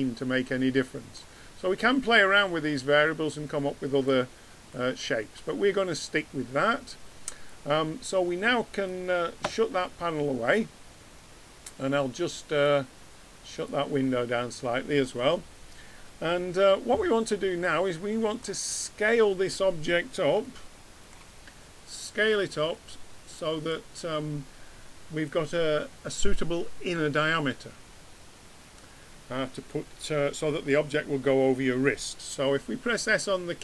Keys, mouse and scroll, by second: 8.5 click, 12.6 click, 13.1 click, 15.3 middle click, 15.5 middle click, 18.9 middle click, 20.9 middle click.